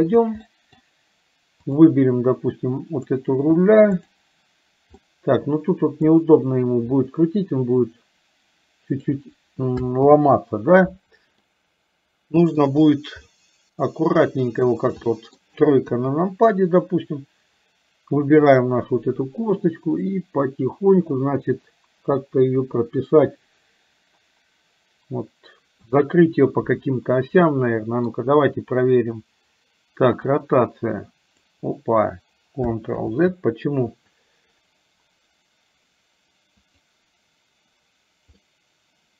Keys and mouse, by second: 0.5 middle click, 5.1-6.1 middle drag, 7.3-9.3 drag, 10.1 ctrl+z, 11.5-12.6 middle drag, 13.4-14.6 middle drag, 15.1 middle click, 15.9 KP_3, 18.4 click, 22.3-25.9 middle drag, 27.5 middle click, 30.4-31.6 drag, 33.1 ctrl+z, 36.6 click, 38.5-39.1 middle drag.